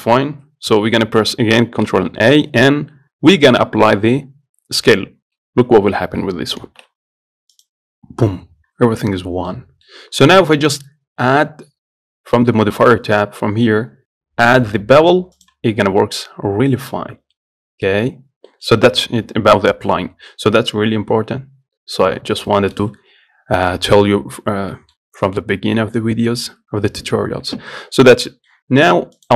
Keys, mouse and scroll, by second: 2.1 ctrl+a, 6.8 ctrl+a, 9.5 scroll down 1, 9.7-11.0 middle drag, 13.1 click, 15.7 click, 16.2 scroll up 1, 16.4 middle click, 17.3-17.6 scroll down 1, 17.6 middle click, 18.5 scroll down 1, 18.7 middle click, 19.0-20.4 scroll up 1, 20.4-20.8 scroll down 1, 20.8-21.5 scroll up 1, 22.3 scroll up 2, 22.4 scroll down 2, 22.7 middle click, 23.1 scroll up 2, 28.6 middle click.